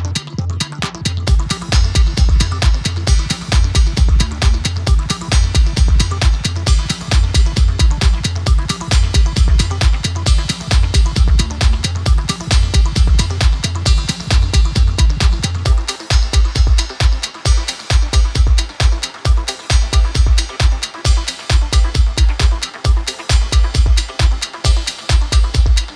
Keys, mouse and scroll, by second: 0.5-1.8 drag, 2.6 ctrl+t, 3.3-6.4 drag, 8.5 shift+click, 9.3-11.0 click, 12.3 alt+scroll up 1, 13.3 click, 15.3 ctrl+j, 16.1 right click, 17.7 click, 17.8 right click, 19.6 click, 24.0 click.